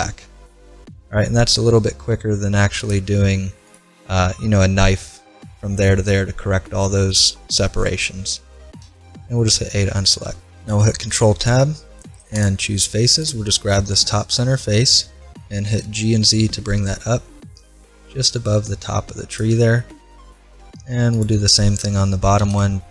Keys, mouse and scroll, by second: 2.6 ctrl+r, 4.1-5.9 middle drag, 7.1-9.4 middle drag, 8.8 a, 9.8 middle click, 10.9 ctrl+Tab, 13.2-15.1 right drag, 15.1 middle click, 15.7 g, 19.8 middle click, 21.1-22.9 right drag, 22.4 g.